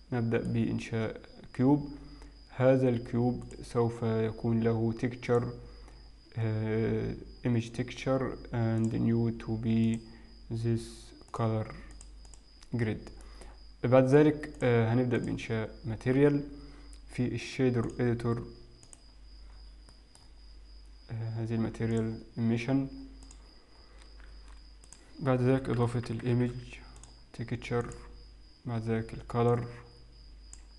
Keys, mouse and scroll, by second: 0.1 shift+middle click, 0.1-1.1 scroll down 2, 1.1-1.7 scroll up 3, 3.5 click, 5.3 click, 8.9 click, 12.4 click, 13.3 middle click, 14.6 click, 16.3 click, 18.1 click, 19.7-20.9 scroll down 4, 20.9 middle click, 20.9 scroll down 1, 22.0 click, 23.9-24.4 scroll up 4, 24.4 shift+a, 29.6 click.